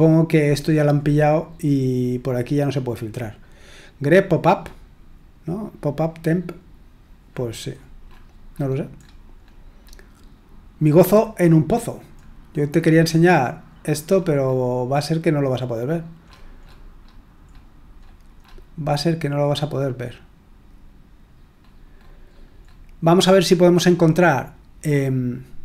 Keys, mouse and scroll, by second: 7.2-10.7 scroll up 1, 11.1-12.1 scroll up 1, 12.2-12.7 scroll up 2, 12.7-13.8 scroll down 2, 14.1-14.5 scroll up 2, 14.5-15.0 scroll down 2, 15.0-15.4 scroll down 1, 16.2-19.7 scroll up 2, 19.8-20.4 scroll up 2, 20.4-21.3 scroll up 1, 21.6-22.7 scroll down 2, 24.8 click.